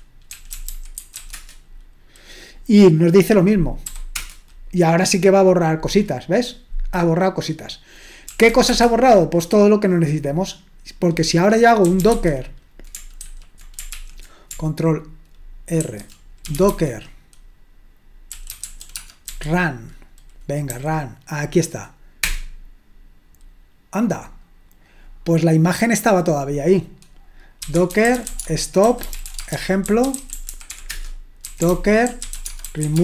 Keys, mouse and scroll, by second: 0.0-1.7 typing, 4.1 Return, 4.1 typing, 8.2-9.0 typing, 11.7-12.6 typing, 13.2 ctrl+w, 13.9 ctrl+l, 15.8 ctrl+r, 16.3-19.3 typing, 22.2 Return, 27.4-33.0 typing.